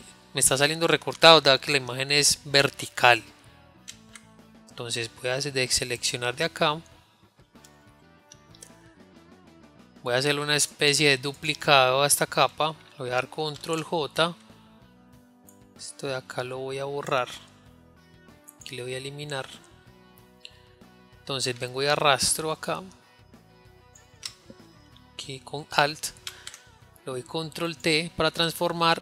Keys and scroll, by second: 5.6 ctrl+d, 13.9 ctrl+j, 28.4 ctrl+t.